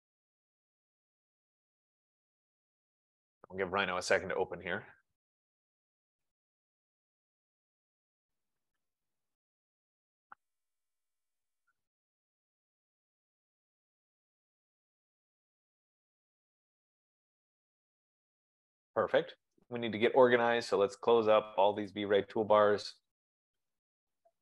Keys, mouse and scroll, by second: 20.1 click, 21.4 click, 22.0 click, 23.2 click, 23.9 click.